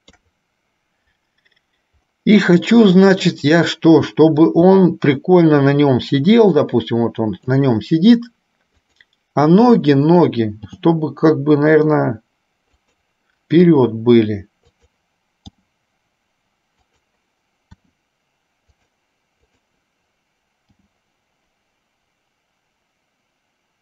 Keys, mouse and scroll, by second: 0.3 KP_3, 3.4 click, 4.9 g, 10.8 g, 19.7 click.